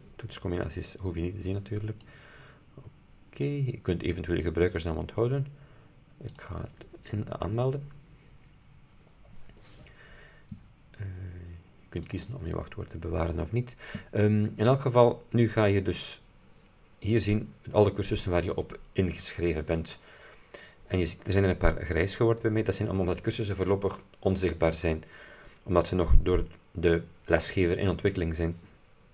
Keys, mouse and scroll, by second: 1.3 click, 1.5 click, 1.7 click, 1.8 click, 6.4 click, 12.1 click.